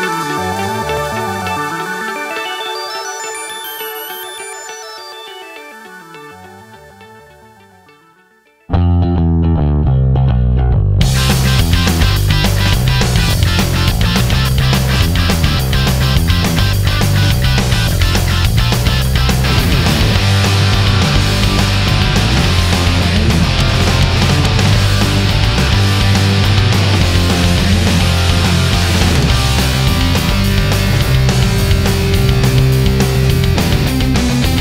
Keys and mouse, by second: 4.4-5.6 middle drag, 7.4-9.4 middle drag, 9.7 KP_0, 12.2-13.4 drag, 33.2-34.6 drag.